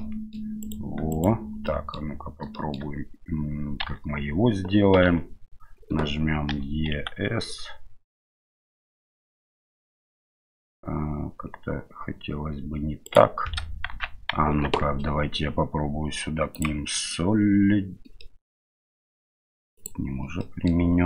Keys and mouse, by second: 0.6-1.2 right drag, 1.6-2.0 middle drag, 2.5 shift+middle drag, 3.8 Tab, 5.1 a, 6.5 e, 13.9 ctrl+z, 14.6 Tab, 18.2 middle click, 19.8 click, 20.4 middle click.